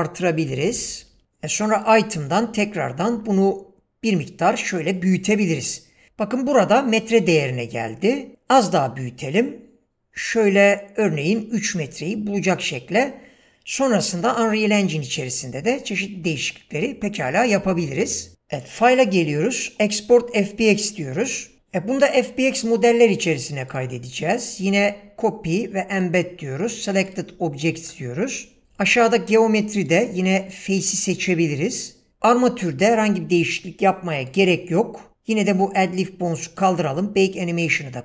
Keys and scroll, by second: 0.5-1.2 typing, 3.1 s, 8.6 s.